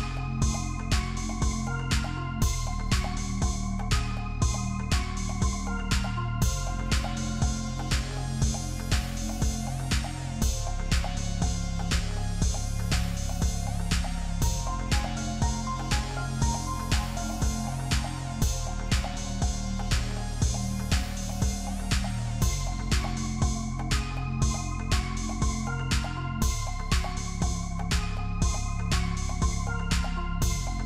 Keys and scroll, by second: 2.3 ctrl+=, 8.3 ctrl+=, 8.9 space, 9.0 space, 12.7 ctrl+-, 22.0 typing, 26.6 ctrl+z, 28.6 ctrl+g.